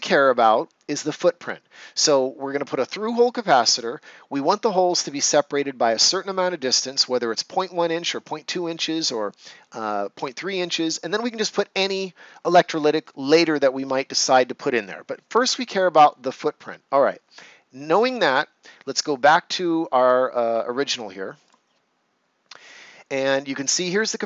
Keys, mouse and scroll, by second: 21.4 click.